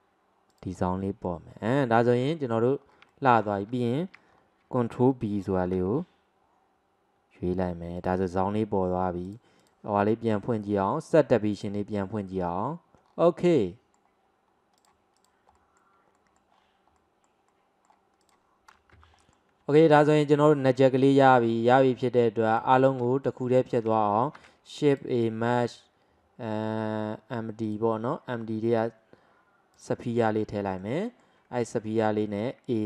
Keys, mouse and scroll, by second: 0.5 alt+shift+click, 1.1-1.5 middle drag, 1.5-1.9 scroll down 1, 1.9-2.9 shift+middle drag, 2.9 scroll up 1, 3.1-4.3 shift+middle drag, 4.3 scroll up 1, 5.4-5.7 scroll up 1, 5.7 ctrl+b, 9.3-11.7 drag, 13.1 scroll down 1, 13.6-14.9 middle drag, 14.9 click, 15.3 click, 15.6-16.6 middle drag, 16.6-17.0 scroll down 2, 17.0-18.3 middle drag, 18.3 click, 19.0 Delete, 19.3-19.8 middle drag, 21.4-22.6 middle drag, 22.6 click, 23.3-24.4 shift+middle drag, 24.4 shift+a, 30.2 alt+middle click, 31.1 alt+middle click, 31.7 click.